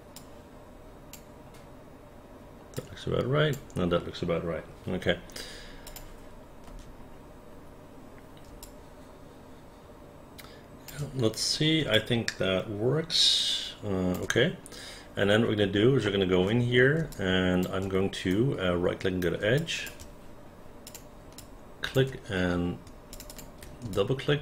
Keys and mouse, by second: 0.1-1.1 drag, 2.8 click, 5.9 click, 6.7 space, 8.6-10.9 alt+drag, 11.9-14.1 alt+drag, 16.1 alt+middle click, 17.1 alt+click, 18.3 right click, 19.6 alt+click, 20.9 click, 21.4 alt+click, 23.1 shift+click, 23.3 shift+click, 23.9 alt+click.